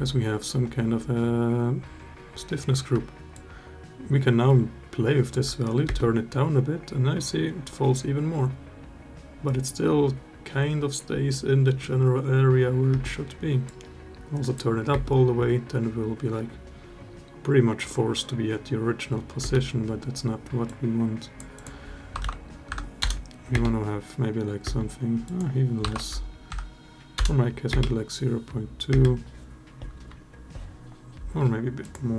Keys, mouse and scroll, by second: 3.2-5.1 shift+drag, 5.6 space, 12.7 space, 13.4 click, 14.7 space, 19.2 space, 20.5 click, 21.3-22.8 drag, 23.3 space, 24.4 space, 25.0-27.0 drag, 27.5 space, 28.7 space, 31.6-32.1 drag.